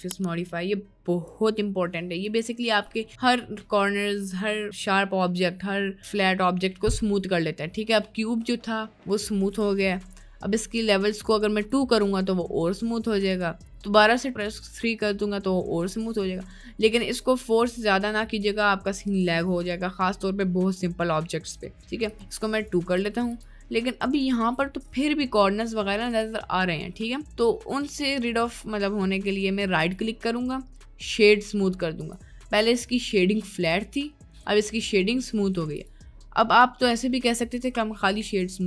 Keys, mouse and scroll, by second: 1.3-2.5 drag, 3.1 middle click, 11.6 click, 14.0 click, 17.7 click, 22.1 click, 23.0 click, 23.9-24.4 middle drag, 27.2 middle click, 27.8 middle click, 28.4 middle click, 29.9-30.2 drag, 31.3-33.3 drag, 35.7 click.